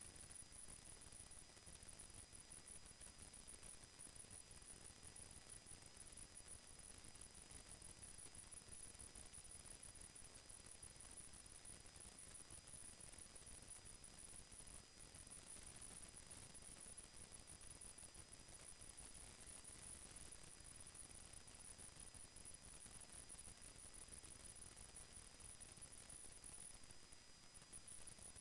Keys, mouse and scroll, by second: 2.8 3, 3.3 *, 4.5-6.8 typing, 8.8 click, 11.5 click, 14.5 right click, 18.4 click, 21.4 click, 24.7 click, 26.2 click.